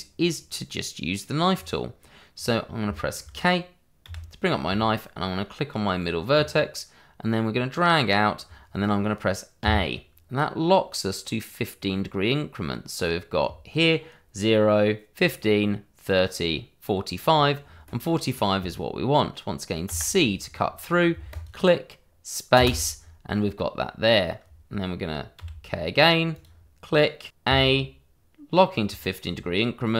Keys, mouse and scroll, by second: 1.5 scroll down 1, 2.3 scroll up 1, 2.9 shift+middle click, 4.0 k, 6.3 click, 9.6 a, 19.8 c, 21.3 click, 22.5 space, 25.4 k, 26.3 click, 27.4 a.